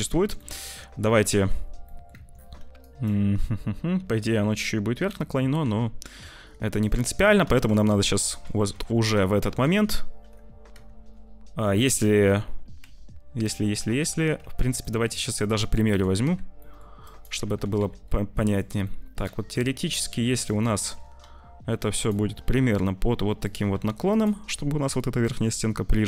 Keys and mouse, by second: 0.1 Tab, 0.4 click, 1.0 `, 1.9 click, 2.1 Tab, 2.8 click, 5.5 `, 6.2 ctrl+s, 7.0 Tab, 7.5 shift+click, 8.2 shift+click, 9.3 z, 10.6 z, 12.7 z, 14.4 Tab, 14.8 click, 15.2 Tab, 15.8 Tab, 16.1 z, 16.5 click, 17.0 click, 17.5 g, 18.8 middle click, 19.1 `, 19.7 shift+middle click, 20.2 z, 20.6 shift+middle click, 21.1 r, 22.1 g, 23.6 r, 25.1 g.